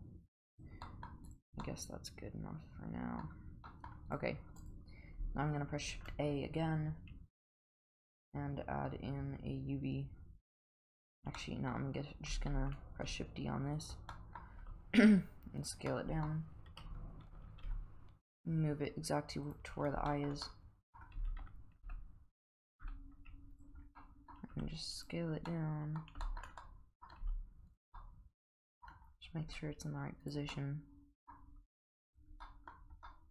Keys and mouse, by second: 0.8 middle drag, 1.6-3.2 middle drag, 3.7 middle drag, 4.1 click, 4.6 click, 5.9 shift+a, 10.9 click, 11.4 middle drag, 12.6 shift+d, 14.1 middle drag, 14.6 s, 15.9-16.2 middle drag, 16.7 KP_1, 17.6 g, 20.1 shift+middle click, 20.4-21.0 middle drag, 21.2 g, 24.0 middle click, 24.5 s, 25.5-26.0 middle drag, 26.2 shift+middle click, 26.6-27.0 middle drag, 27.2 g, 27.9-28.9 middle drag, 29.5 g, 30.5-31.3 middle drag, 31.6 g, 32.4 middle drag, 33.1-33.3 middle drag.